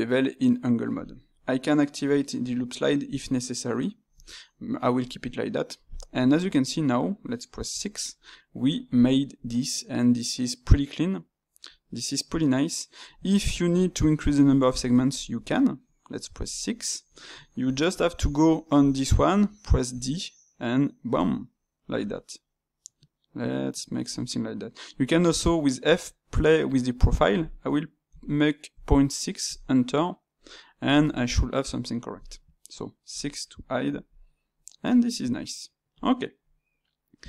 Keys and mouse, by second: 6.0-11.1 middle drag, 13.4-18.0 ctrl+middle drag, 30.4-37.2 middle drag.